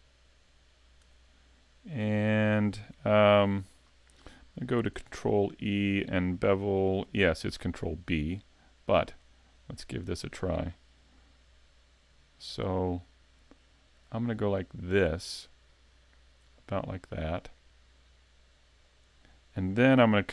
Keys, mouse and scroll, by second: 0.5 shift+right click, 1.1 middle click, 2.2 shift+middle click, 5.0 ctrl+e, 19.0 click.